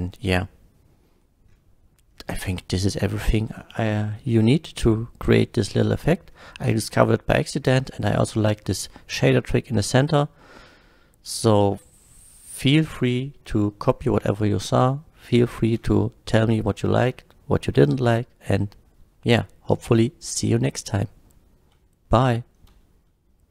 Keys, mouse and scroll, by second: 6.9-7.5 scroll down 2, 7.5 scroll down 1, 14.3-14.8 middle drag, 20.3 middle click.